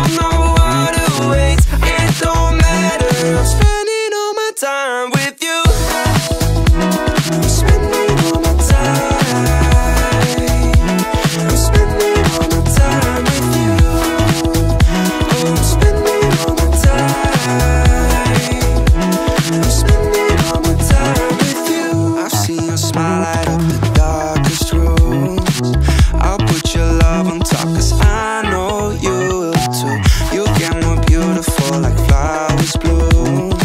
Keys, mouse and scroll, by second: 0.2 shift+Tab, 1.2 g, 3.2 click, 3.5-4.9 scroll up 3, 4.9-5.9 scroll down 1, 6.0 ctrl+a, 8.5 x, 9.2 click, 11.0-12.9 drag, 13.1-15.2 drag, 16.3 click, 16.9 click, 17.3 shift+a, 19.9-21.1 drag, 22.6-23.2 middle drag, 23.9-25.9 drag, 26.9 ctrl+a, 29.7-31.1 drag, 33.0 ctrl+a.